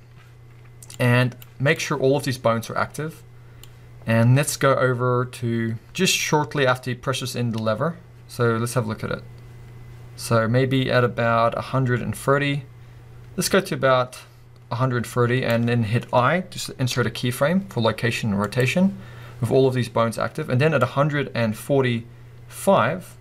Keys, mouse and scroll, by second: 3.7-23.2 drag, 15.8-16.9 scroll up 2, 16.9 i.